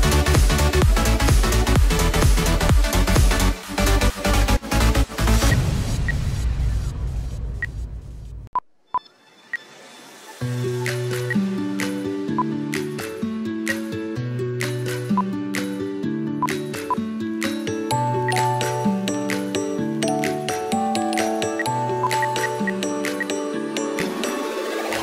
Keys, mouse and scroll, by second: 0.2 right click, 4.3 double click, 6.0 space, 7.0 double click, 8.7 ctrl+right click, 10.2 double click, 11.1 space, 14.9 double click, 16.3 double click, 16.9 ctrl+right click, 18.2 space, 21.4 space, 22.1 ctrl+Page_Down, 24.2 double click.